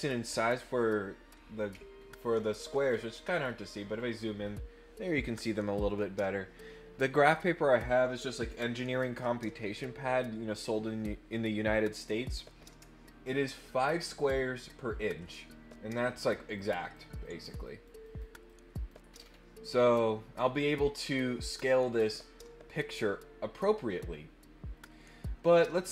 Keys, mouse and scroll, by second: 1.9-2.4 ctrl+scroll up 6, 2.8-3.6 ctrl+scroll up 5, 4.4 scroll up 1, 16.6 click, 17.2 click, 17.6 click, 18.0 click, 18.4 click, 19.0 middle click, 19.0 scroll down 4, 19.1 middle click, 25.5 click.